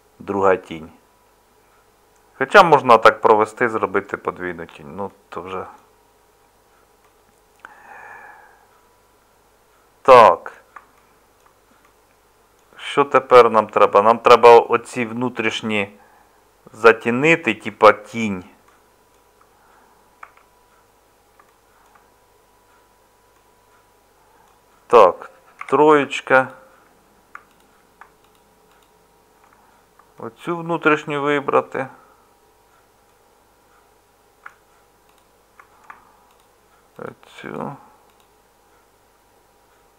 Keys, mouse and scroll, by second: 20.2 Tab, 25.6 3, 35.5 middle click.